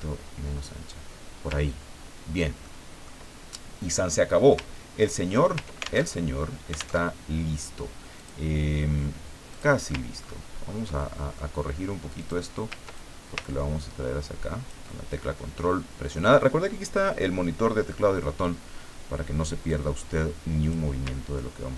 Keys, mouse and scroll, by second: 1.7-2.3 ctrl+scroll down 4, 2.6 ctrl+middle click, 4.7-5.2 ctrl+scroll down 4, 6.0 ctrl+alt+Tab, 7.0 alt+Tab, 8.1 click, 9.5 click, 10.2-10.7 ctrl+scroll up 4, 11.0 ctrl+middle click, 12.2 click, 12.9-15.0 ctrl+drag, 19.7-20.9 drag.